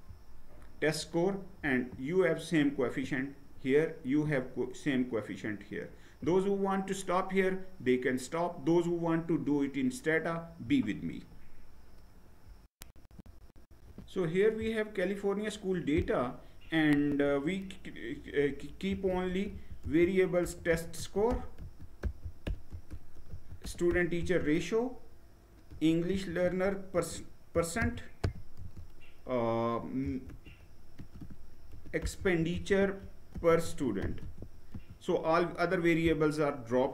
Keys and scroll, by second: 12.7 shift+F9, 18.3-23.8 typing, 25.0-28.3 typing, 29.4-34.3 typing, 34.4 Return.